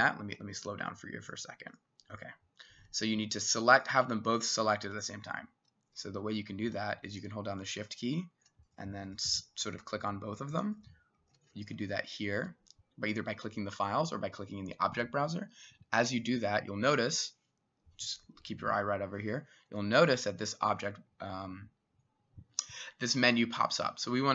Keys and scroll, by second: 0.2 Escape, 6.2 Escape.